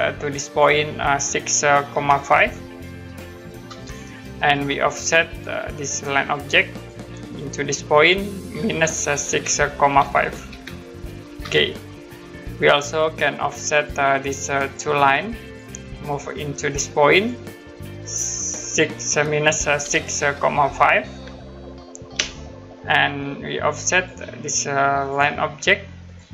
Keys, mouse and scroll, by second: 0.0 click, 1.9 6, 4.9 click, 6.7 click, 8.8 -, 11.4 Return, 13.7 click, 19.6 -, 22.1 Return, 23.9 click.